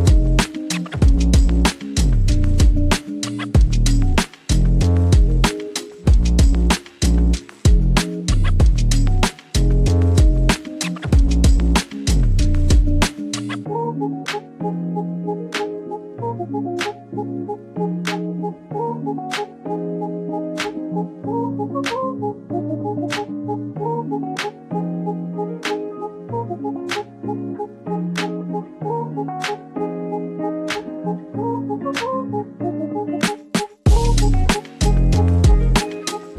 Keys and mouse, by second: 1.1 middle click, 3.9 shift+middle click, 4.6 e, 6.1 click, 6.8 r, 7.7 click, 8.2 g, 9.0 click, 9.9 shift+middle click, 12.3 g, 13.2 click, 14.1 shift+middle click, 15.4 shift+middle click, 16.4 click, 16.9 middle click, 18.1 r, 20.1 click, 20.7 click, 23.1 middle click, 23.8 click, 25.0 g, 26.5 click, 27.5 shift+middle click, 29.3 r, 31.2 click, 31.6 s, 32.3 click, 32.8 g, 33.7 click, 34.7 shift+middle click, 35.3 shift+middle click.